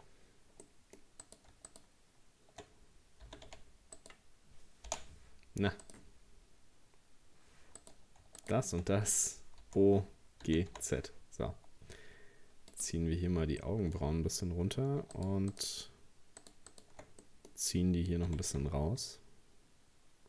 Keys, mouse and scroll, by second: 0.6 middle click, 1.2 right click, 1.7 shift+right click, 3.3 g, 4.9 p, 5.8 right click, 7.8 right click, 8.4 shift+right click, 9.6 o, 10.5 g, 13.1-13.5 scroll down 2, 13.6 middle click, 14.0-14.5 scroll up 1, 15.2 shift+right click, 15.5 shift+right click, 16.4 shift+right click, 16.7 shift+right click, 17.2-18.3 middle drag, 18.3 g.